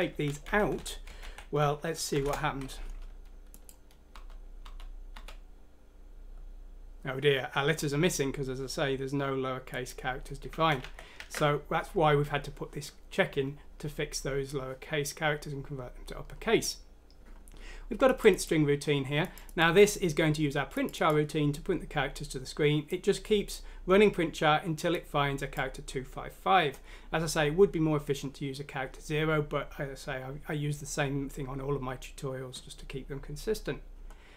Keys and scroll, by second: 0.0-1.2 typing, 0.1 Down, 0.3 Left, 2.2 F6, 2.2 Return, 3.8-5.1 typing, 10.6 ctrl+z, 11.2 ctrl+z.